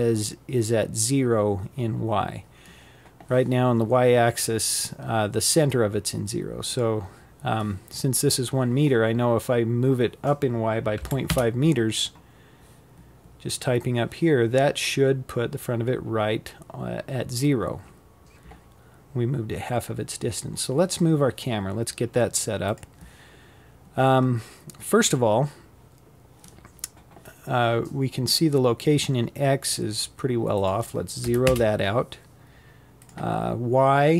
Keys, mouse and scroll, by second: 4.3-7.4 drag, 16.6-17.4 scroll down 4, 17.4-20.2 scroll up 1, 20.2 click, 28.2-33.7 drag.